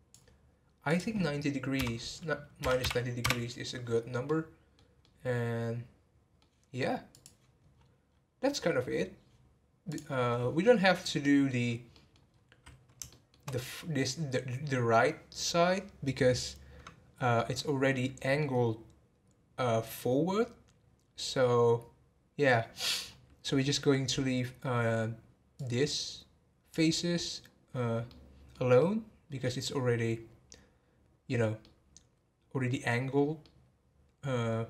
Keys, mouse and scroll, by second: 0.9-3.9 drag, 4.2-7.1 middle drag, 7.1 click, 7.7-9.3 scroll down 6, 9.9 click, 10.6 middle click, 11.5 scroll down 1, 11.6 scroll up 1, 11.9 middle click, 12.3 scroll up 1, 13.1-16.2 shift+middle drag, 17.3-20.5 middle drag, 23.0-23.5 scroll down 1, 23.5-24.2 middle drag, 24.2 scroll up 4, 25.6 click, 27.5 scroll down 4, 28.1-34.6 middle drag.